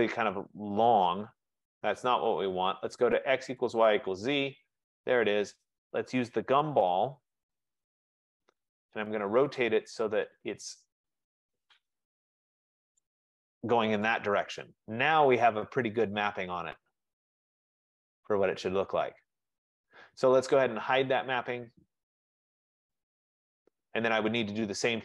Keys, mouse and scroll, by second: 2.6 right click, 3.9 click, 9.2 click, 13.1 shift+click, 20.0 right click, 22.0 click, 23.3 middle click, 23.4 middle click, 24.3-25.0 scroll.